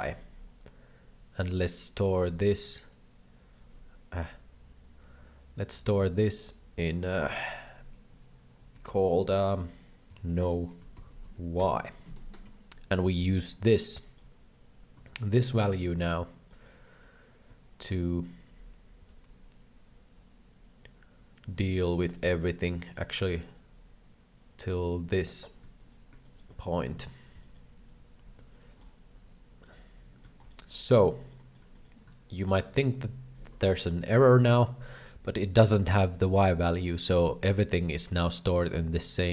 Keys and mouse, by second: 0.0 shift+middle click, 1.6 click, 2.5 ctrl+z, 3.1 click, 4.2 click, 5.4 click, 6.3-12.3 drag, 13.1 ctrl+c, 13.5 middle click, 14.0 middle click, 15.3 ctrl+v, 16.0 middle click, 16.5 middle click, 19.0 ctrl+v, 21.6 ctrl+v, 22.3 ctrl+z, 24.3 click, 25.7 shift+middle click, 26.2 shift+middle click, 27.3-28.4 right drag, 28.4 shift+g, 28.7 shift+middle click, 29.6 middle click, 30.4 shift+middle click, 31.7 shift+middle click, 32.9 shift+middle click, 34.0 KP_7, 36.8 shift+middle click.